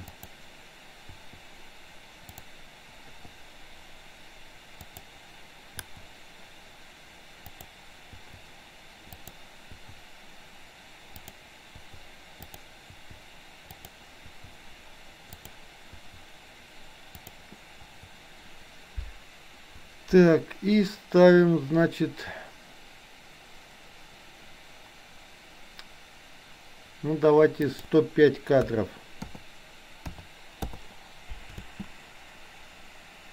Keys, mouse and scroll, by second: 0.1 click, 2.4 click, 3.1 i, 4.9 click, 7.6 drag, 9.1-9.5 drag, 11.3 click, 12.5 drag, 13.8 click, 13.8 i, 15.5 click, 17.3 click, 27.8-30.6 drag, 31.6 space.